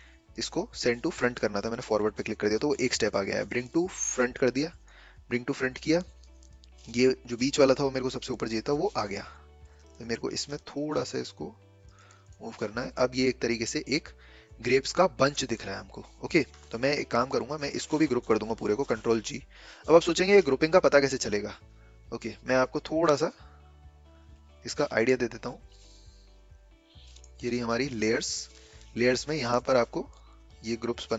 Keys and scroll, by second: 18.5 ctrl+g.